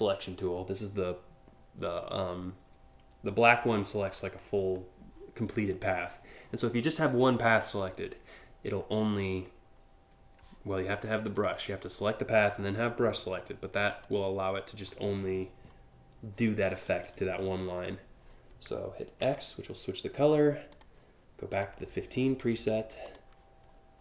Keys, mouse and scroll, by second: 8.5 click, 10.9 click, 13.5 click, 19.0 x, 20.4 click, 21.1 click, 22.7 click, 23.7 click.